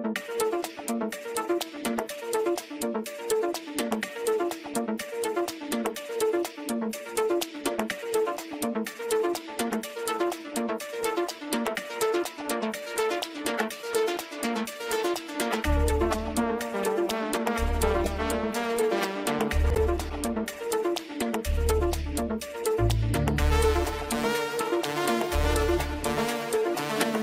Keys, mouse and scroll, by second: 0.1 scroll down 1, 0.4-2.0 middle drag, 2.0 click, 2.5-3.1 scroll up 2, 3.6-6.2 middle drag, 6.2-6.7 scroll down 2, 6.7-7.5 middle drag, 7.5-8.0 scroll up 2, 8.0-11.0 middle drag, 12.9 click, 14.4-14.9 scroll down 1, 14.9 click, 20.4-21.4 middle drag, 21.4-22.5 scroll up 2, 22.5-23.2 scroll up 1, 23.2-23.7 drag, 23.7-24.4 scroll up 4, 24.4-25.2 shift+middle drag, 25.2-25.6 scroll up 1, 25.6-26.8 shift+middle drag, 26.8-27.2 scroll up 2.